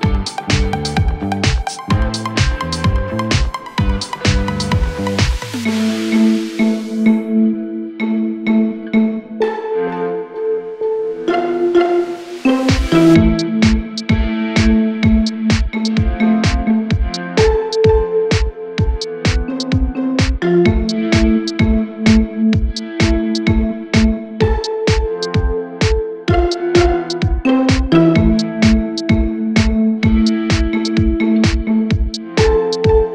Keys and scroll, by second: 11.3 ctrl+d, 11.5 Escape, 13.8 ., 15.4 4.